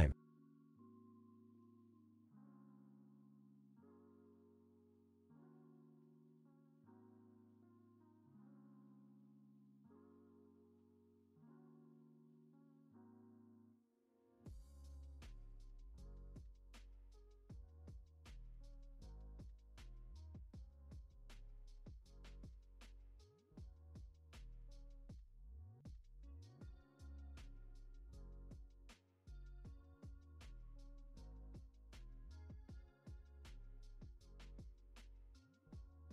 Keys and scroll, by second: 3.4 ctrl+z, 14.0 ctrl+s, 14.8 x, 15.7 alt+x, 25.7 alt+x, 27.1 ctrl+c, 28.3 ctrl+c, 30.3 ctrl+s.